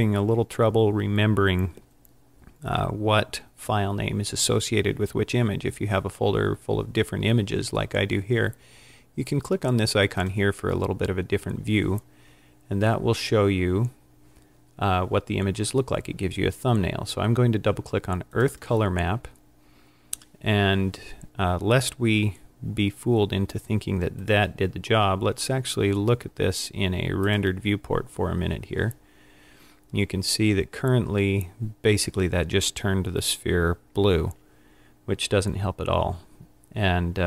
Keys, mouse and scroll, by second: 18.5 click, 24.2 click.